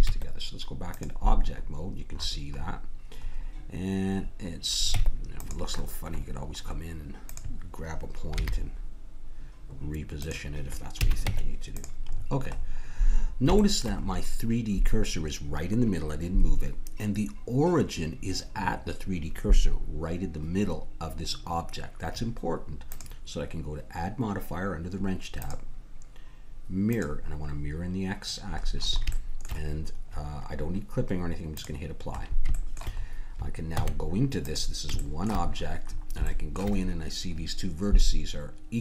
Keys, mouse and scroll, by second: 0.1 Tab, 1.4-3.6 middle drag, 4.9 Tab, 7.3-9.0 drag, 8.3 g, 11.0 a, 11.2 Tab, 22.9-24.7 drag, 25.4-27.7 drag, 28.6-31.5 middle drag, 31.5-32.9 drag, 32.9 middle click, 33.0 click, 33.1 middle click, 33.7 Tab.